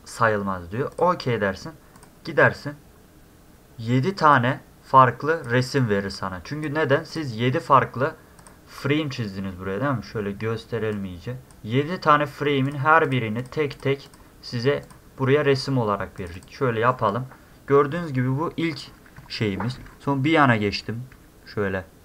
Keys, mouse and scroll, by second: 0.9 click, 2.0 click, 4.3-5.4 drag, 5.8-6.6 drag, 7.1 click, 8.4 click, 10.9-11.5 drag, 12.7 click, 13.1 click, 13.4 click, 13.7 click, 14.1 click, 14.8 click, 16.2 click, 16.3 click, 18.2 middle click, 18.2 scroll, 18.5 middle click, 18.5 scroll, 18.8-20.0 middle drag, 18.8-19.7 scroll, 19.7-20.0 scroll.